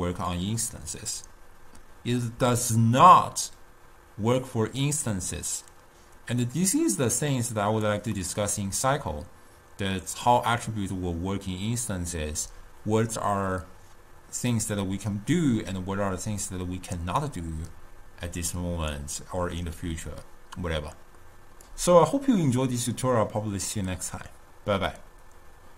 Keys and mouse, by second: 0.1 click, 7.0-8.4 drag, 8.4-12.0 middle drag.